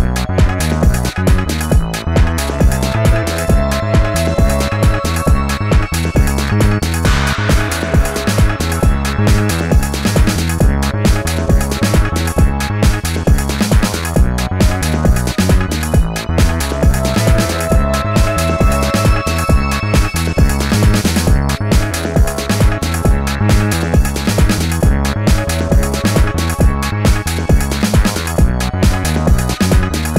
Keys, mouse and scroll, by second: 0.0 space, 5.7 ctrl+shift+a, 6.0 alt+scroll down 1, 6.1 space, 6.8 alt+scroll up 1, 7.1 space, 12.9 ctrl+shift+a, 13.2 space, 16.5 ctrl+z, 19.9 ctrl+shift+a, 20.3 alt+scroll down 1, 20.4 space, 22.1-22.6 alt+scroll up 2, 24.0 space, 26.2 space, 28.3 ctrl+shift+a, 28.6 space.